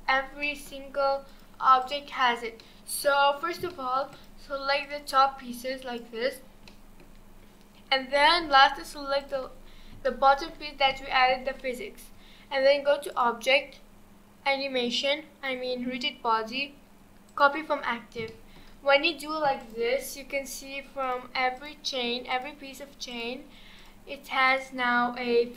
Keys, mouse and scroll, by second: 0.1-0.4 scroll down 2, 0.4-1.3 middle drag, 1.3 click, 1.8 click, 2.1 click, 2.6-3.4 middle drag, 3.4 scroll down 1, 3.7-4.1 shift+middle drag, 4.1 click, 4.8 click, 6.7-7.1 shift+middle drag, 7.1-9.1 shift+scroll up 9, 9.2 shift+click, 9.6-10.0 scroll down 4, 10.0-10.6 shift+middle drag, 10.6-10.9 scroll down 2, 10.9-13.1 shift+middle drag, 13.1-16.3 drag, 18.3-19.0 shift+middle drag, 19.0 scroll up 2, 19.6 click, 21.0 click, 21.6 click, 22.3 click, 23.1 click, 23.8 click, 24.5 click.